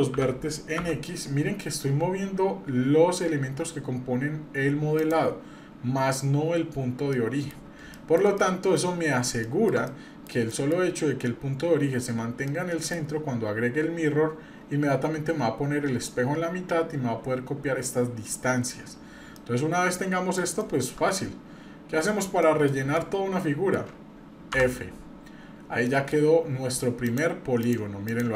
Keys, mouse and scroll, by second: 0.1 g, 7.1 middle click, 7.9 shift+middle click, 8.4 middle click, 8.9 scroll up 2, 9.4 shift+middle click, 9.9 middle click, 10.5 middle click, 12.4 middle click, 18.3 middle click, 18.8-19.3 scroll up 1, 19.3-20.4 middle drag, 20.6 shift+middle click, 21.0 scroll up 1, 21.4 scroll down 1, 22.4 middle click, 22.9 shift+middle click, 24.5 f, 25.8 shift+middle click, 27.1 click, 27.6 click, 28.1 click.